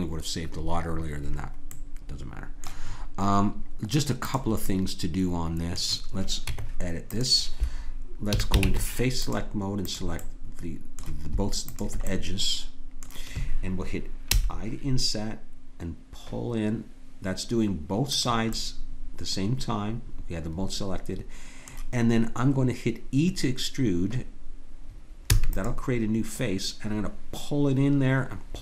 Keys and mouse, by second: 1.7 middle click, 4.3-6.5 drag, 6.5 Tab, 8.3 a, 8.6 ctrl+Tab, 9.9-12.1 drag, 12.2-13.7 drag, 14.3 i, 18.5-20.6 middle drag, 25.3 e.